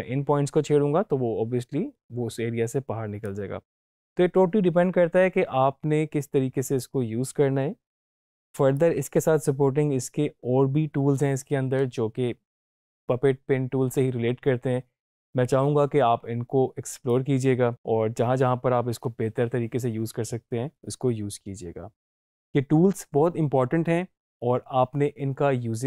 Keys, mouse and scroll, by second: 8.8-17.2 drag.